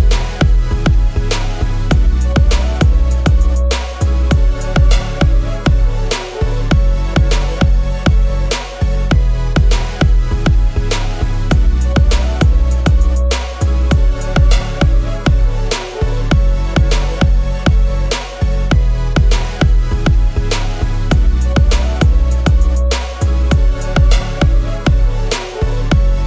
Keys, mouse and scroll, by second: 16.2 shift+click, 16.9 shift+Left, 17.1 shift+Left, 19.0-19.4 shift+scroll up 1.